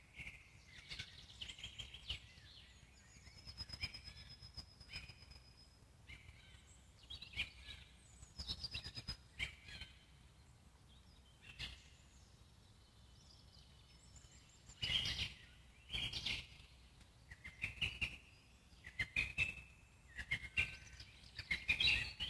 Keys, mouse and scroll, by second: 3.4-6.6 drag, 6.6-8.7 scroll up 2, 9.7 click, 10.5-12.1 scroll up 9, 12.1 alt+middle click, 12.8-14.7 drag, 14.7 ctrl+z, 15.6 click.